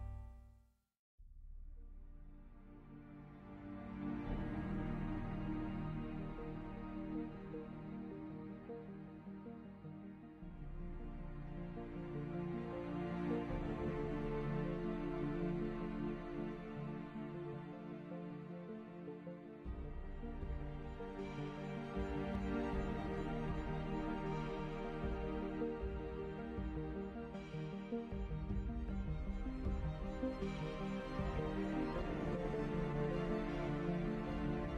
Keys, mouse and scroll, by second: 0.8 a, 0.8 ctrl+s, 1.7 KP_5, 2.2 z, 3.7 middle click, 4.2 shift+z, 5.4 middle click, 5.8-8.1 typing, 9.6 r, 12.8 ., 12.9 r, 17.6 r, 20.0 r, 23.2 shift+z, 25.1 s, 26.0 a, 26.0 ctrl+s, 27.2 Tab, 27.7 s, 28.8-31.5 typing, 32.8 a, 33.1 Tab, 33.4 ctrl+s.